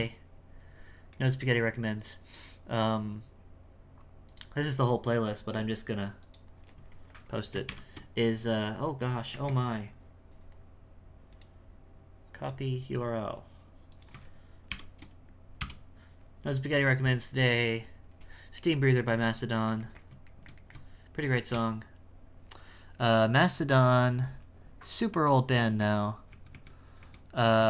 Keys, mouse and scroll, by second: 19.4-21.5 middle drag, 21.5 space, 25.8 z, 26.3 z, 27.0 z.